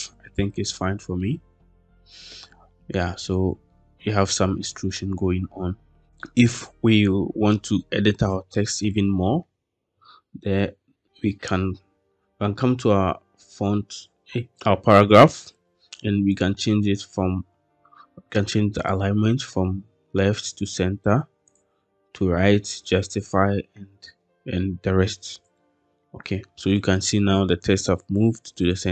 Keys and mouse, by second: 1.1-2.2 middle drag, 2.9-3.6 middle drag, 6.1-6.8 middle drag, 7.7-8.1 shift+middle drag, 16.3-17.0 drag, 18.7-20.7 drag, 21.5-23.3 drag, 25.4-25.8 shift+middle drag, 26.6-27.2 middle drag.